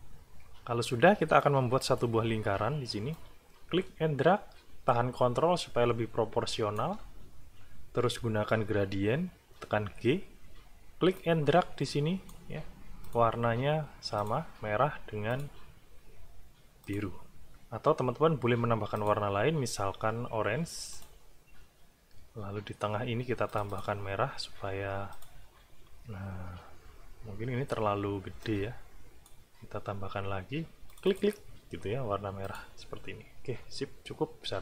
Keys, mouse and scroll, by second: 1.4 click, 2.3 e, 3.1-7.0 drag, 7.4-7.8 ctrl+scroll up 1, 9.8 g, 11.2-12.5 drag, 13.1 click, 14.2 click, 15.3 click, 16.9 click, 18.9 click, 20.9 click, 23.5 click, 25.1 click, 28.4 click, 30.9 click, 32.5 click.